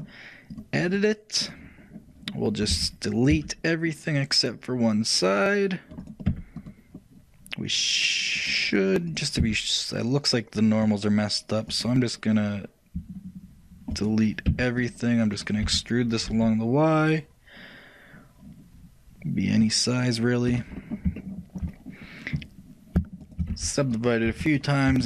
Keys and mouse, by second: 0.6-2.9 drag, 2.9 a, 6.8-20.6 right drag, 9.5 x, 14.6 shift+x, 20.9-23.4 shift+middle drag, 23.4-25.0 shift+right drag, 23.6 shift+w.